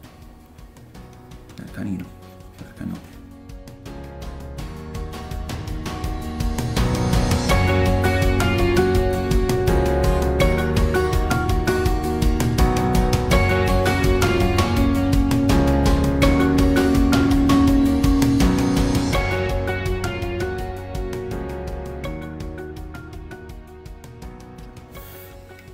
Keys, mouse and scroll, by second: 0.5-1.8 drag, 1.3 f, 1.8 middle click, 2.0-4.6 drag, 4.3 f, 4.6 middle click, 4.7-8.0 drag, 5.3 shift+middle click, 8.0 middle click, 8.5-14.0 drag, 9.8 ctrl+middle click, 10.0 middle click, 10.1 shift+middle click, 11.0 shift+middle click, 12.4 ctrl+middle click, 12.5 middle click, 12.7 ctrl+middle click, 13.0-14.1 shift+middle click, 13.1 middle click, 13.4 middle click, 13.5 middle click, 14.0 shift+middle click, 14.7 click, 15.1 middle click, 15.2-22.6 drag, 16.2 shift+middle click, 16.3 middle click, 16.5 ctrl+z, 16.7 ctrl+middle click, 19.2 ctrl+middle click, 19.3 middle click, 19.7 shift+middle click, 21.0 f, 21.1 middle click, 22.5 f, 22.6 middle click, 22.7-24.7 drag, 24.1 ctrl+middle click, 24.2 ctrl+middle click, 24.7-25.7 ctrl+middle drag.